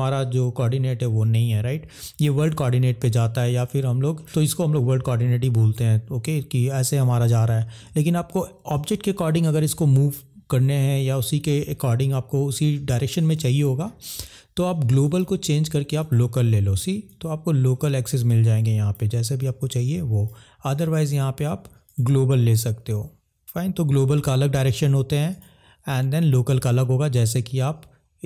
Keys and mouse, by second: 4.1 middle click, 7.4 middle click, 9.3 middle drag, 13.3 middle click, 15.1-16.5 drag, 17.0 click, 19.5 click, 21.0-22.2 drag, 22.3-22.6 middle drag, 25.3-26.5 drag, 26.8 middle drag.